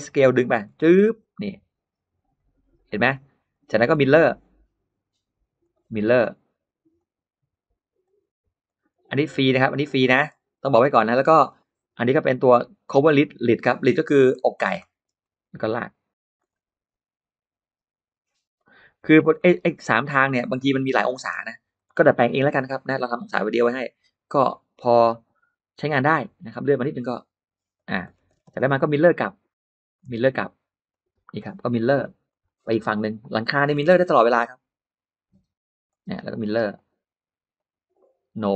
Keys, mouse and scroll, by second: 0.2 click, 0.5 middle click, 2.2 click, 2.8 middle click, 2.8 space, 3.4 click, 3.8 middle click, 4.2-4.5 scroll down 1, 5.5 click, 6.8 click, 7.9 click, 8.5 click, 9.5 click, 9.9 middle click, 10.1-10.4 scroll down 1, 11.3 click, 12.8 click, 13.5 click, 13.9-15.4 scroll up 3, 14.7 middle click, 15.9 click, 16.3 scroll down 1, 18.4 click, 18.9-19.3 scroll down 1, 19.0 space, 19.2 middle click, 19.6-20.0 scroll up 1, 20.4 click, 20.6 scroll up 2, 20.7 middle click, 21.1 scroll down 2, 21.2 scroll up 1, 21.2 scroll down 2, 21.6 middle click, 26.5 click, 27.6 click, 27.9-28.7 scroll down 2, 28.2 space, 28.6 middle click, 29.3 click, 30.2 shift+click, 30.7 shift+click, 32.1 click, 32.5 middle click, 32.5-32.8 scroll down 1, 33.3 middle click, 33.7-34.0 scroll up 2, 35.7 click, 36.6 click, 37.4 click, 38.3 click.